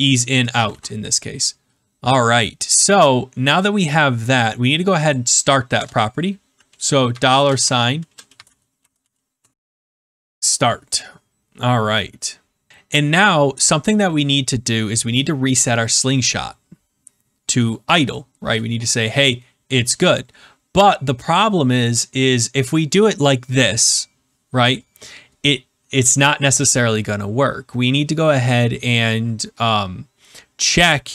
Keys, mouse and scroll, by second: 1.5 ctrl+s, 3.9 click, 5.7 Return, 7.0-10.0 typing.